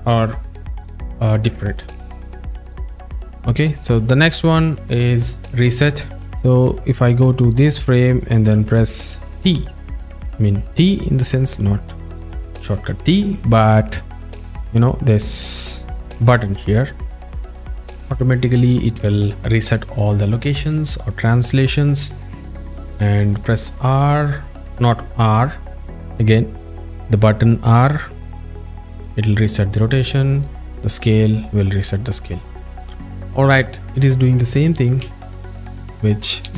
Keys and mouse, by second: 1.9 click, 4.1 click, 5.4-8.2 drag, 9.5 click, 14.7 z, 22.6 z, 23.8 click, 27.1 z, 29.2 z, 31.6 z.